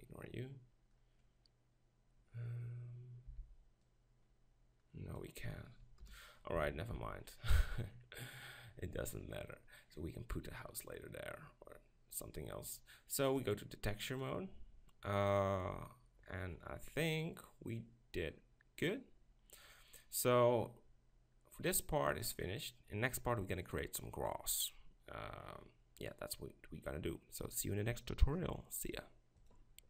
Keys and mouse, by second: 3.3 b, 6.0 KP_0, 6.6 a, 7.0 z, 13.3-15.0 drag, 15.4-17.2 middle drag, 26.8-28.4 middle drag.